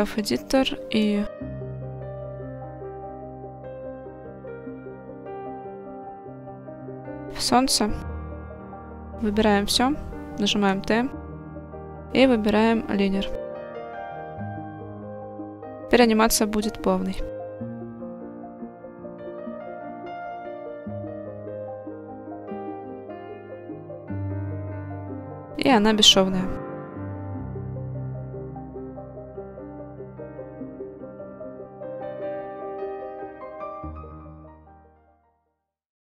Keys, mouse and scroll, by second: 2.3 click, 3.4 click, 4.2 click, 5.4 click, 6.3-6.9 middle drag, 8.5 a, 10.7 t, 16.4-17.9 drag, 18.8 click, 19.6 middle click, 21.0-21.7 drag, 22.1 click, 22.8 click, 23.4 middle click, 25.8-34.8 middle drag, 35.3 shift+middle drag, 35.8 middle click.